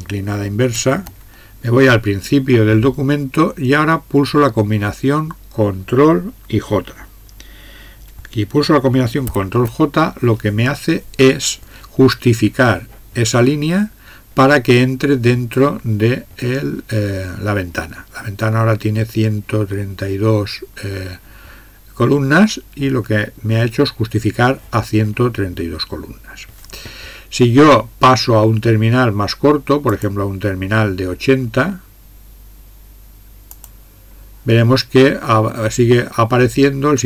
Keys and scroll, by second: 0.7 alt+\, 9.3 ctrl+j.